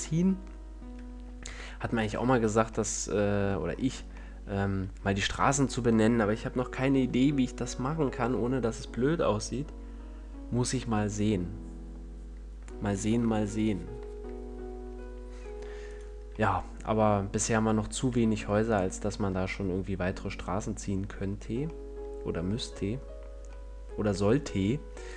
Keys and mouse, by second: 1.4 KP_7, 2.2 a, 15.8 right click, 17.6-18.6 middle drag, 18.6-20.0 right drag, 20.0 middle click.